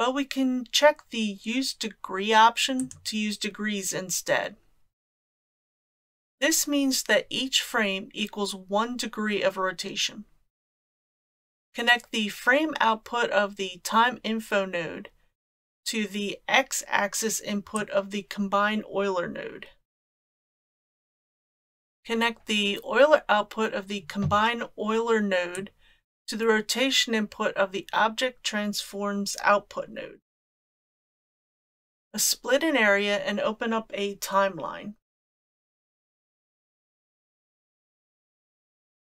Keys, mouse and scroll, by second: 2.8 click, 17.8-20.5 drag, 25.5-30.6 drag, 31.5 shift+middle click, 35.4-38.4 drag.